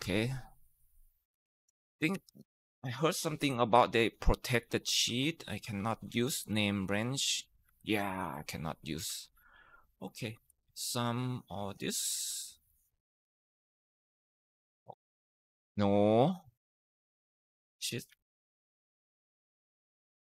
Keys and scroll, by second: 1.2 Down, 1.5 ctrl+shift+Right, 2.0 ctrl+shift+Down, 3.6 alt+F3, 5.4-5.9 typing, 6.3 Return, 7.5 Down, 8.6-10.9 typing, 12.0 ctrl+shift+Right, 12.3 ctrl+shift+Down, 12.7 Return, 13.0 Up, 13.3 Left, 13.6 Left, 13.7 Right, 13.9 Right, 18.0 ctrl+Left, 18.5 Right, 19.4 ctrl+shift+Down.